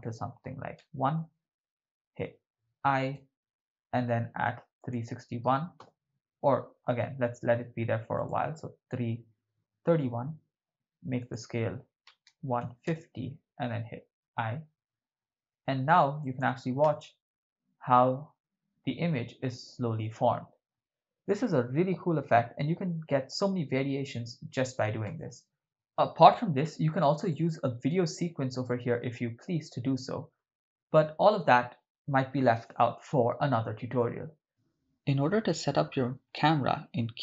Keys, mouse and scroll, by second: 3.2 i, 4.8 click, 5.9 Right, 8.3 click, 9.7-10.7 Left, 11.2-13.1 drag, 14.3 i, 16.3 click, 16.9 shift+space, 25.5 shift+space, 27.3 middle click, 28.7 middle click, 36.0 drag.